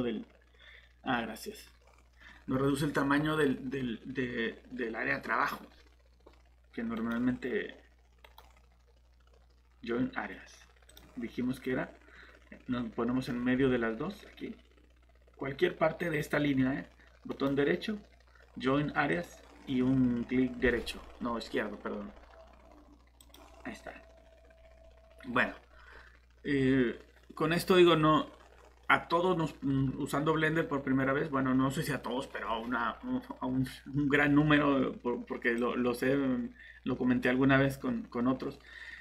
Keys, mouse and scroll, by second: 6.9 right click, 10.9 click, 17.3 right click, 19.1 click.